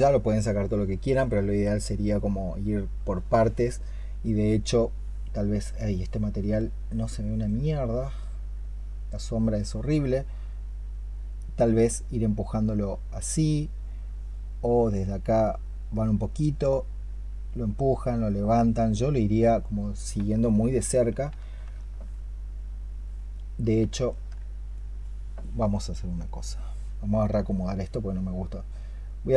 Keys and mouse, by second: 1.9 double click, 20.3 alt+click, 21.6 alt+click, 23.9 ctrl+click.